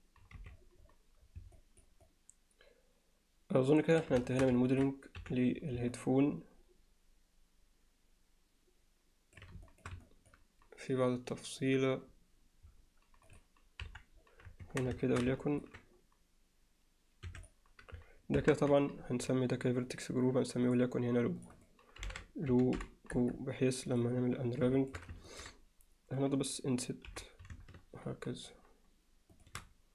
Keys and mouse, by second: 0.4 z, 1.6 alt+middle drag, 2.1-4.0 alt+middle drag, 4.3 alt+shift+middle drag, 4.7 ctrl+alt+middle click, 5.2 n, 5.9-9.4 middle drag, 9.7 alt+shift+middle drag, 10.1 alt+middle drag, 13.3 click, 13.8 KP_1, 14.7 Tab, 15.0 alt+shift+middle click, 15.4 ctrl+alt+middle click, 17.3 3, 17.4 click, 18.4 ctrl+KP_Add, 19.9 click, 20.7 drag, 21.6-23.3 drag, 23.9 click, 24.8 alt+shift+middle click, 25.3 ctrl+alt+middle click.